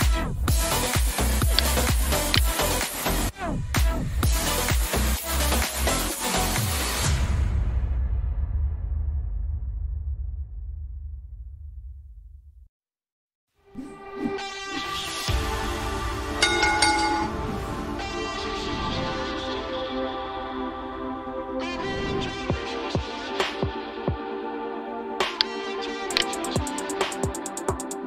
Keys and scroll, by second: 2.0 alt+2, 3.6-6.2 typing, 8.4 ctrl+shift+n, 10.3-11.6 typing.